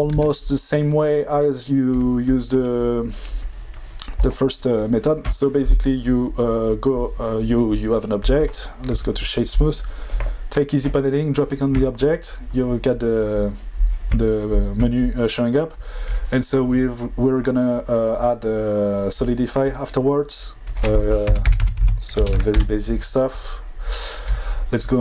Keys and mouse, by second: 0.1 shift+a, 8.4-8.9 right drag, 16.1-19.2 drag, 20.8-22.5 drag, 21.8 KP_0.